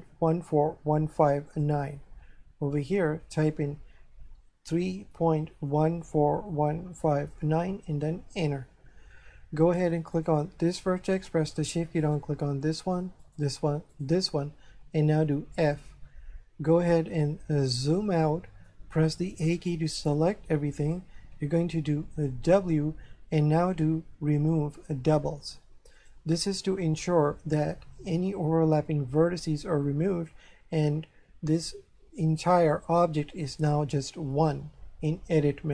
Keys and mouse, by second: 1.5 click, 2.8 click, 4.7-7.4 typing, 10.2 right click, 12.0 shift+right click, 13.3 shift+right click, 15.5 f, 17.7 shift+middle click, 19.3 a, 22.1 w, 26.0 click.